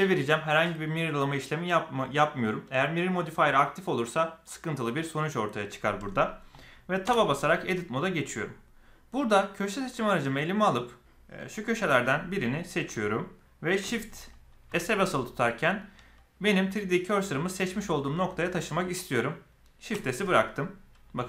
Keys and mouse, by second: 7.0 Tab, 9.5 click, 11.4 click, 12.1 middle click, 14.6 shift+s.